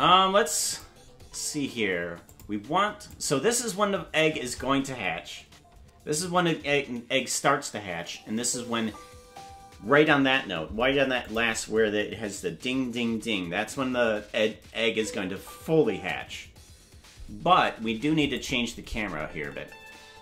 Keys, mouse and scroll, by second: 0.7 click, 1.2 space, 2.3 space, 2.3 click, 3.1-4.5 drag, 8.4 space, 10.4 space, 11.3 click, 14.9 space, 18.4 click, 19.0 space.